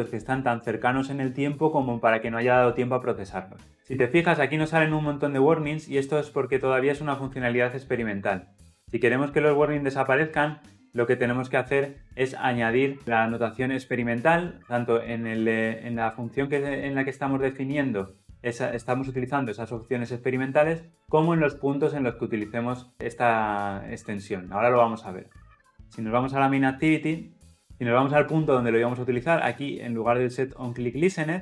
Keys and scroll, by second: 9.7 alt+Return.